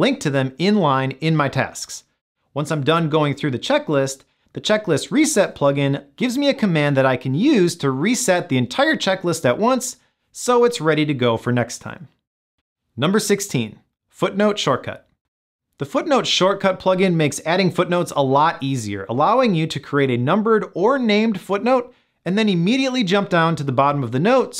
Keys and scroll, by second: 10.9 Return.